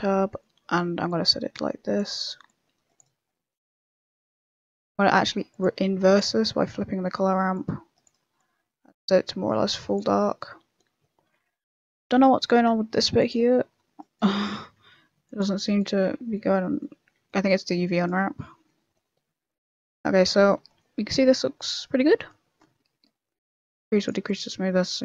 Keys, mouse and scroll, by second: 1.0 click, 2.4 click, 5.5 click, 6.4 middle click, 7.5 click, 8.3 click, 10.1 middle click, 11.6 Tab, 11.9 middle click, 12.3 a, 12.9 ctrl+r, 14.3 ctrl+z, 14.7 ctrl+r, 15.9 ctrl+z, 16.3 middle click, 17.1 Tab, 17.2 middle click, 17.9 right click, 18.2 middle click, 20.5 shift+middle click, 20.7 middle click, 23.7 click, 24.2 click.